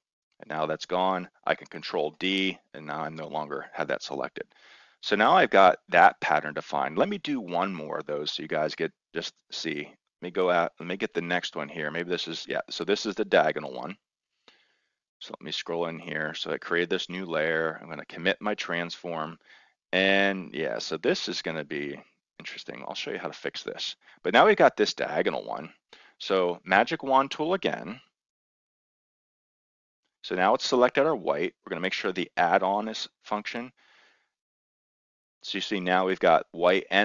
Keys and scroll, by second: 2.0 ctrl+d.